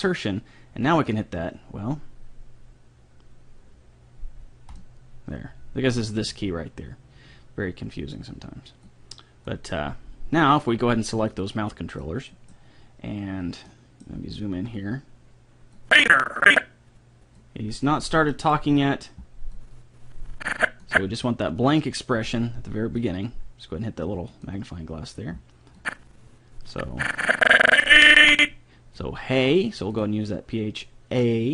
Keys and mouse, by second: 4.7-6.6 drag, 8.8-10.7 drag, 11.3-13.0 drag, 12.1-15.9 middle drag, 15.9-17.6 drag, 18.3-19.6 middle drag, 19.6-21.2 drag, 23.0-27.6 drag, 29.9-31.5 drag.